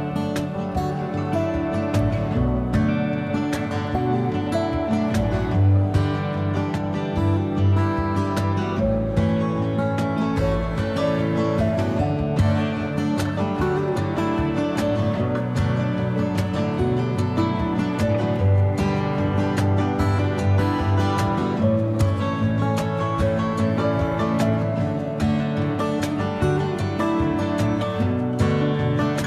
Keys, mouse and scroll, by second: 16.0-18.3 middle drag, 18.3-19.3 ctrl+drag, 19.3 middle click, 19.4 click, 20.1 middle click, 20.9-21.8 ctrl+drag, 21.8-23.9 middle drag, 23.9-25.0 drag, 25.0-26.7 shift+middle drag, 26.7-27.8 ctrl+drag, 27.8-29.2 middle drag.